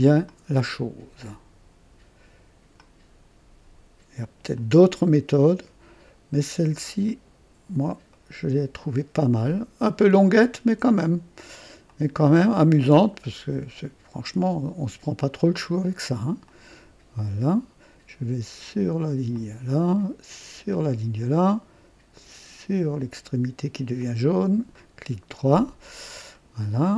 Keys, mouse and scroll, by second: 0.2 click, 2.7 click, 4.5 click, 7.0 click, 8.1 right click, 11.8 click, 16.4 click, 19.3 click, 20.7 click, 23.9 click, 24.7 right click, 26.3 right click.